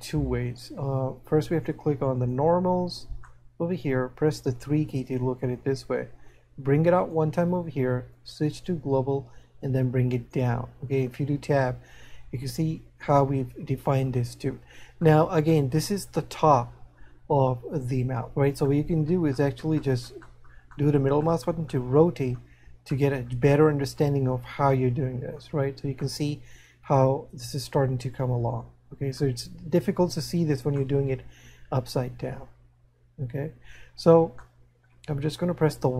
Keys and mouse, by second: 1.5 click, 3.4 middle click, 6.7 click, 8.5 click, 9.8 click, 11.8 middle click, 15.1 middle click, 19.0 middle click, 20.3 middle click, 22.9 middle click, 25.0 middle click, 26.1 middle click, 30.8 middle click.